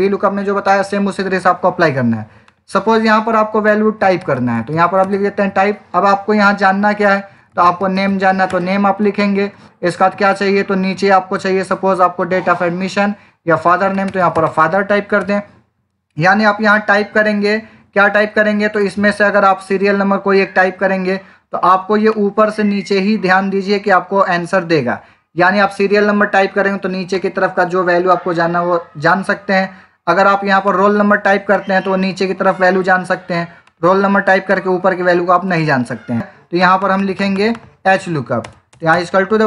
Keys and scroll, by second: 3.8-5.1 typing, 7.2-8.5 typing, 13.3-14.8 typing, 15.1 Return, 38.3-39.4 typing.